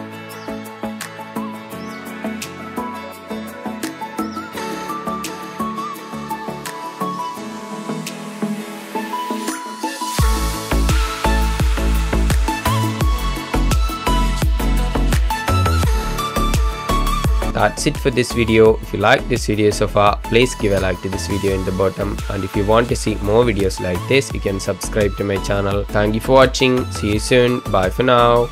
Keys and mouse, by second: 0.1 shift+d, 0.2 x, 1.7 middle click, 2.4 click, 3.4 space, 7.4-8.1 middle drag, 10.6-11.4 shift+drag, 13.8 space, 16.8 click, 17.3 click, 17.6 space, 28.1 space.